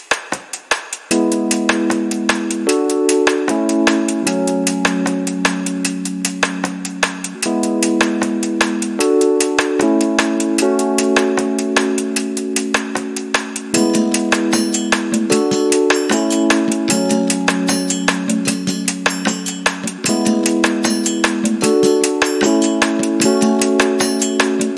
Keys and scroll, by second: 0.2 Return, 0.8 space, 3.4 t, 8.1 space, 14.3 KP_Divide, 15.4 4, 16.3 Return, 17.2 space, 19.2 space, 20.9-22.2 typing, 24.3 Return.